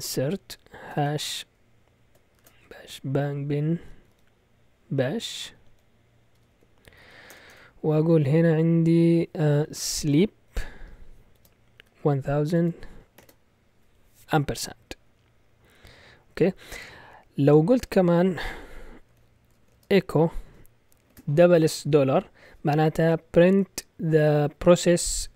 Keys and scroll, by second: 0.0-4.6 typing, 5.6-7.5 typing, 9.4-13.2 typing, 18.8-21.1 typing.